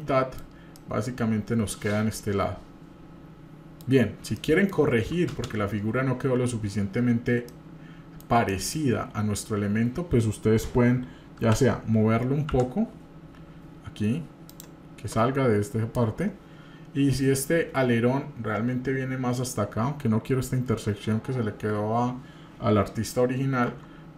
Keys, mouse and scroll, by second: 5.3 ctrl+space, 7.4 scroll down 1, 7.5-8.2 middle drag, 8.5 middle click, 9.7-10.4 scroll up 2, 11.4 g, 23.7 Tab.